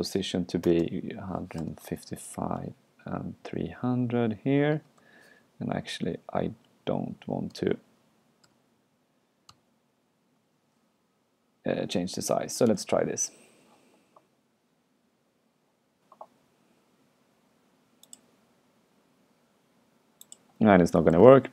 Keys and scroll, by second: 2.6 super+Right, 6.4 super+Left, 7.6 super+y, 9.1 super+t, 9.5 super+y, 21.2 super+q.